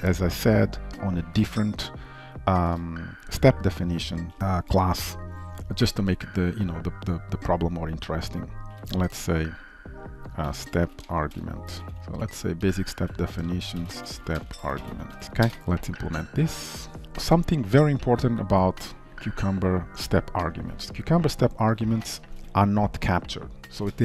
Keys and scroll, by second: 12.0 ctrl+x, 17.0 ctrl+s, 22.4 ctrl+shift+Right.